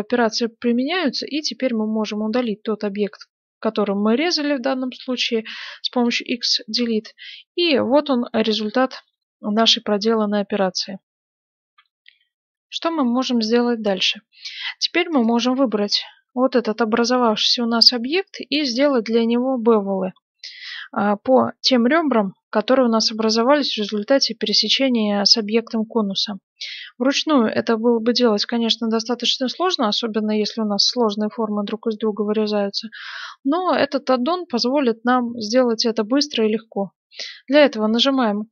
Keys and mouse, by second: 5.5 x, 6.7-9.0 middle drag, 11.6 F9, 15.1-19.4 right drag, 15.9-19.4 drag, 19.4-26.6 middle drag, 26.9-38.5 middle drag.